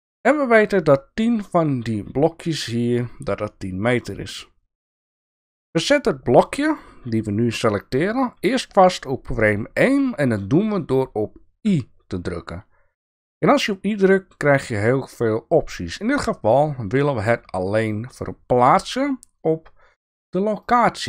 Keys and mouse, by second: 6.7 click, 11.6 i.